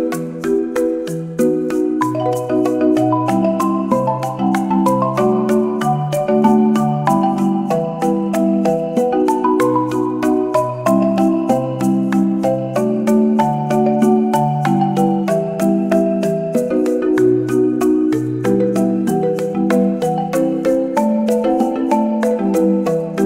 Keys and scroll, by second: 14.1 space, 15.5 space, 18.5 x, 21.3 space.